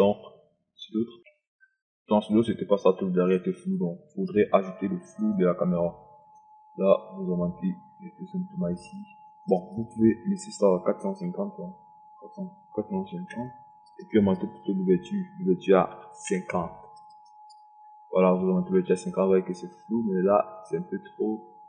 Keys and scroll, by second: 13.3 4, 13.6 5, 14.0 KP_0, 16.6 KP_5, 17.0 KP_0.